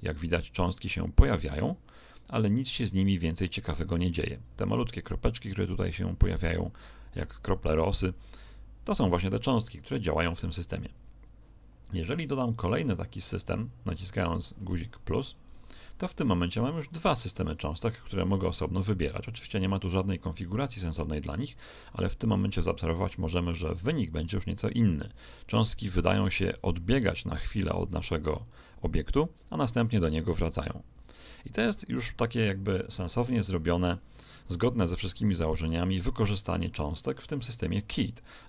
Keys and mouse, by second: 0.6-3.3 middle drag, 14.6 Escape, 15.4-20.5 drag, 23.6 alt+a, 25.3-27.6 middle drag, 35.9 Escape.